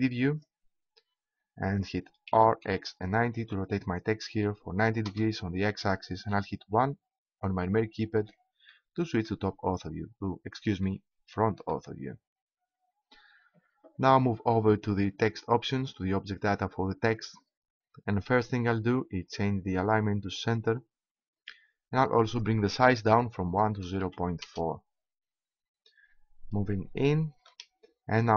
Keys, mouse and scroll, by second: 2.3 r, 6.7 KP_1, 9.7-15.1 middle drag, 15.7-17.7 drag.